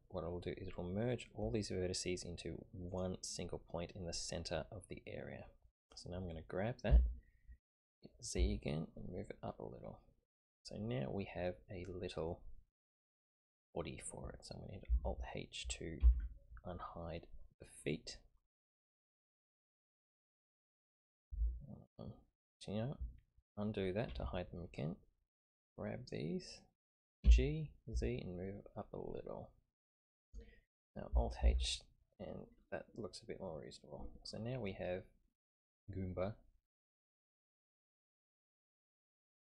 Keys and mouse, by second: 6.8 g, 16.0 alt+h, 24.1 ctrl+z, 25.6 click, 27.2 g, 31.4 alt+h, 34.7-35.5 middle drag, 38.3 click, 38.9-39.4 middle drag.